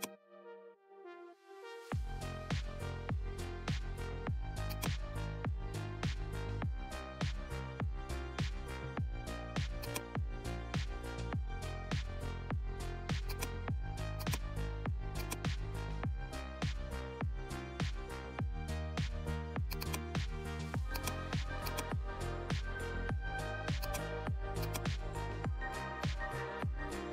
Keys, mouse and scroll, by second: 4.8 click, 9.8-19.6 drag, 23.8 click, 25.7 scroll down 1.